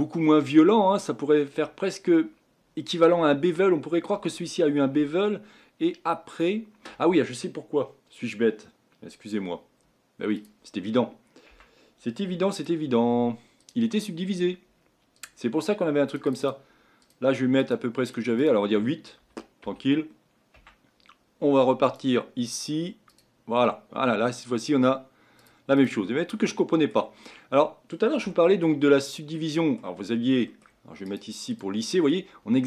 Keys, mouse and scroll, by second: 10.3-11.5 drag, 11.5 Tab, 12.5-15.1 right drag, 15.1-19.2 drag, 19.2 Escape, 19.6 Escape, 20.5 Tab, 21.8-26.3 drag, 26.3-28.9 middle drag, 28.9 scroll up 2, 29.3-30.1 middle drag, 30.1-30.5 scroll down 1, 30.5-31.0 middle drag, 31.0-31.9 right drag, 31.9-32.6 middle drag.